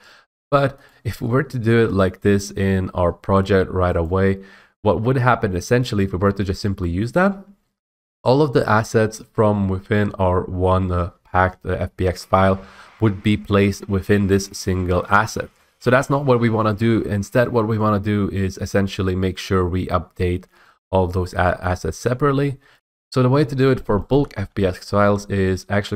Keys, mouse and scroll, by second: 1.0 click, 2.2 click, 4.2 middle click, 6.2 right click, 14.7-17.4 drag, 21.5 middle click, 21.7 scroll, 24.3-24.6 typing, 24.9 right click.